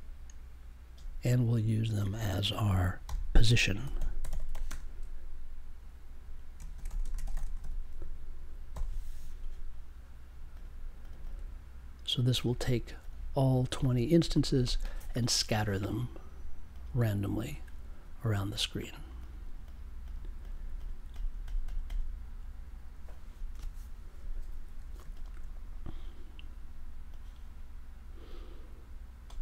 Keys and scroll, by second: 3.0-5.0 typing, 6.5-8.1 typing, 8.7 super+j.